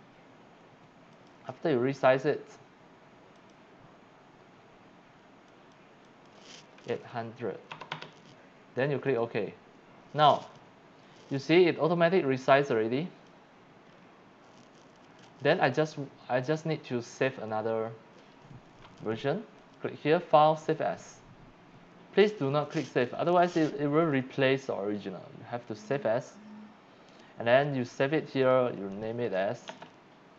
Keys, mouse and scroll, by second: 1.1 click, 3.4 click, 5.5 click, 6.0 click, 6.9 KP_8, 7.7 KP_0, 7.9 KP_0, 9.1 click, 12.7 click, 13.9 scroll down 1, 15.3 click, 16.4 click, 19.6 click, 25.8 click, 28.4 click, 28.9 click, 29.7-30.3 typing.